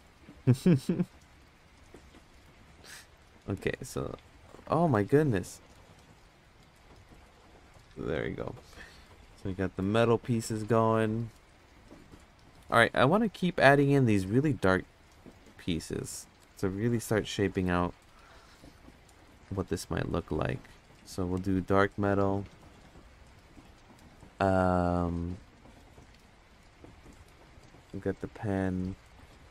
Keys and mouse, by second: 0.4 ctrl+v, 1.0 click, 1.4 click, 2.2 click, 4.6 ctrl+z, 5.7 click, 6.0 click, 7.6 Tab, 13.2 click, 14.8-15.1 drag, 15.7 click, 16.4 click, 20.1 click, 21.3-24.1 drag, 25.1 click, 27.6 click.